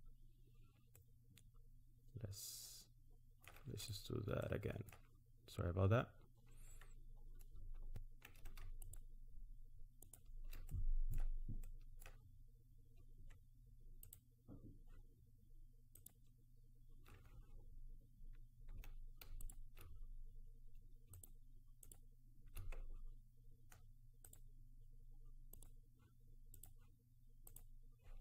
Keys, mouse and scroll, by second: 1.0 middle click, 3.7 click, 4.4 middle click, 8.8 alt+shift+click, 10.7 middle click, 11.7 middle click, 12.3-13.4 scroll up 4, 14.1 alt+shift+click, 19.4 shift+click, 24.3 ctrl+click, 25.7 ctrl+click, 26.6 ctrl+click, 27.5 ctrl+click.